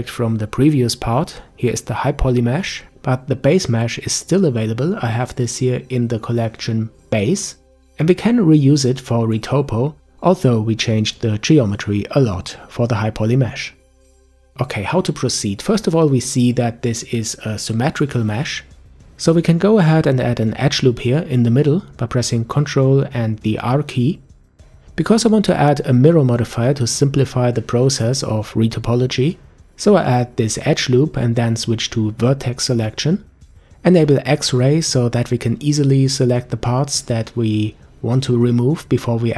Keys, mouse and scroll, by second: 6.1 click, 7.4 click, 9.4 click, 11.8 click, 12.8-14.4 middle drag, 14.4 Tab, 16.5 click, 17.1 Tab, 24.6 ctrl+r, 28.7 click, 31.7 click, 32.7-34.0 middle drag, 34.0-34.9 scroll down 1, 34.9 a, 35.1 a, 36.2 b, 39.1 Delete.